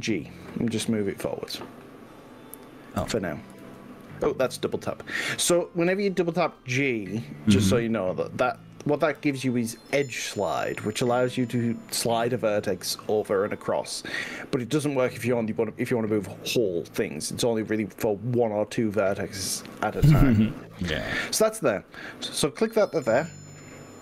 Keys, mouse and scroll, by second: 0.5 g, 3.1 click, 3.7 ctrl+z, 4.6 g, 9.3 y.